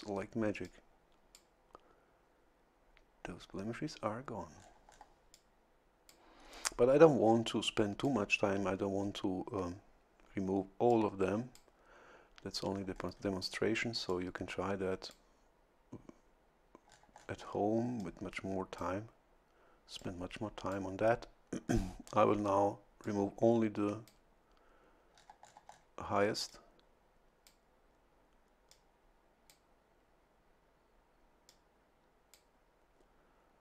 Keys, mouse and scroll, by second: 0.6 click, 4.6-5.1 scroll down 2, 5.3 click, 7.5 click, 10.9 click, 12.7-13.4 scroll up 1, 14.1-15.3 drag, 16.9-17.7 scroll down 1, 18.0-19.0 drag, 20.0-21.1 drag, 21.7-22.3 scroll up 1, 22.3 scroll up 1, 23.0-24.3 drag, 25.1-25.7 scroll down 1, 26.5-27.6 drag, 28.7-29.7 drag, 31.5-32.5 drag.